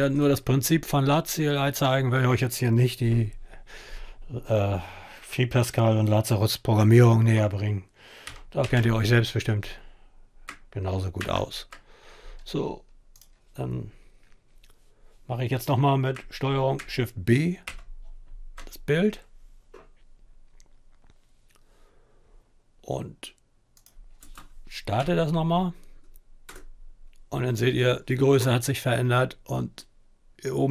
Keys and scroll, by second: 7.7-8.9 typing, 11.0 ctrl+s, 17.3 ctrl+shift+b, 23.9 space, 24.6 Up, 26.2 Return.